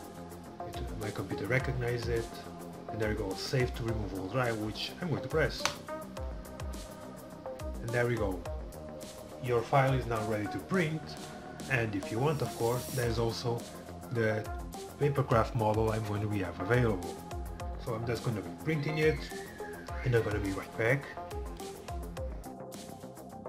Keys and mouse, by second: 22.6 middle click.